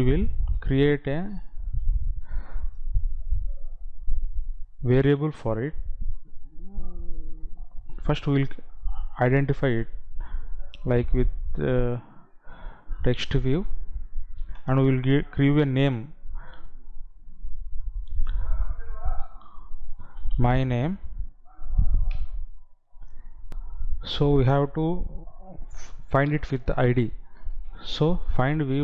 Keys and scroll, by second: 15.0 space, 22.6 space, 23.6 F9.